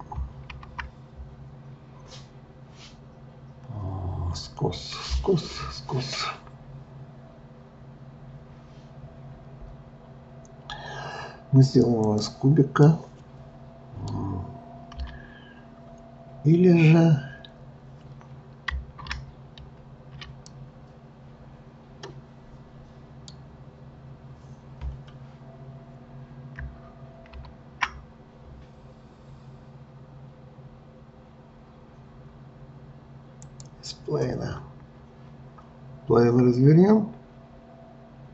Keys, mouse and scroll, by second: 0.5 shift+a, 12.9-14.9 middle drag, 14.9 KP_3, 19.5 ctrl+z, 20.5-23.5 middle drag, 27.3 shift+a, 34.4-37.5 scroll down 1.